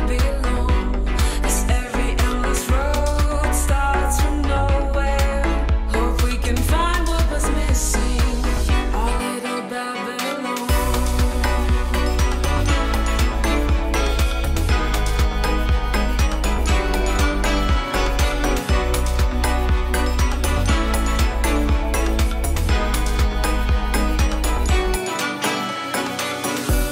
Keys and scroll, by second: 0.4 super+s, 1.5 super+z, 3.4 super+z, 3.8 ], 4.1 super+z, 7.3 ], 11.2 [, 11.9 ], 14.0 ], 14.9 space, 15.2 super+d, 17.4 super+z, 17.7 [, 17.9 [, 21.1 ], 24.4 ], 26.1 super+z.